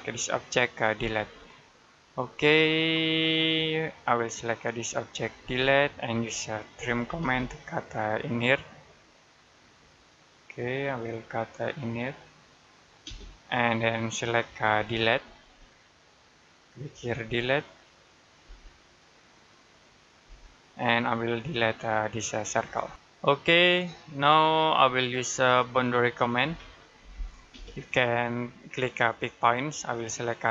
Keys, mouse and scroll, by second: 0.8 Delete, 1.2-1.5 scroll down 1, 1.5 middle click, 2.1-2.4 scroll up 1, 3.2 scroll down 1, 3.4 middle click, 4.2 click, 5.3 Delete, 6.6-6.9 typing, 9.5 click, 12.9 space, 13.2 click, 15.2 Delete, 16.5 click, 17.1 Delete, 17.3 click, 18.3 Delete, 19.7 click, 20.1 Delete, 20.6-20.9 scroll up 1, 22.3 click, 22.7 Delete, 23.4 scroll down 1, 24.1 middle click, 24.7 scroll down 1, 24.9 middle click, 26.3 b, 27.4 space, 29.3 click.